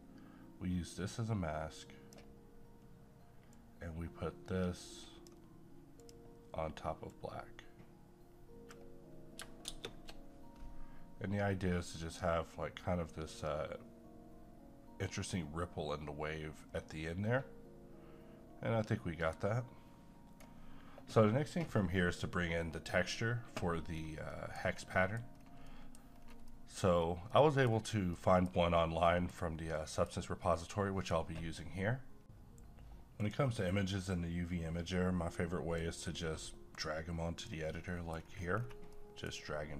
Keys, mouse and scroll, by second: 9.7 shift+space, 11.6-21.6 right drag, 23.9-24.4 scroll down 1, 24.4 middle click, 24.6 scroll down 1, 24.9 middle click, 25.4 scroll up 1, 25.7 middle click, 26.1-26.5 scroll up 1, 26.5 middle click, 26.9-27.3 scroll up 1, 27.3 middle click, 27.7 scroll up 1, 28.1 middle click, 28.5 scroll up 1, 29.1 middle click, 29.4-29.8 scroll down 1, 29.8-32.2 middle drag, 32.2 click, 34.0-37.7 drag, 37.7 middle click, 38.1 scroll up 1, 38.9 middle click.